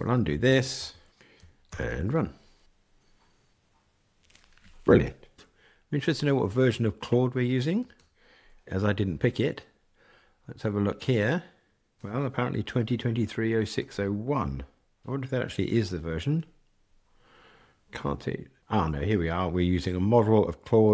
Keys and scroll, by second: 0.5 super+z, 1.6 ctrl+r.